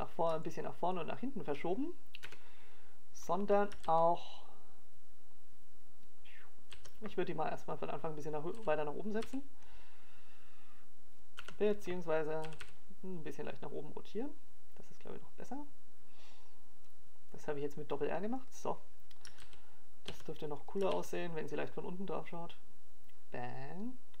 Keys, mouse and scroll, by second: 0.7 KP_7, 2.4-3.0 scroll up 3, 3.0 shift+middle click, 7.0 KP_0, 8.6 alt+a, 12.4 right click, 13.4 g, 17.3 r, 23.4 click.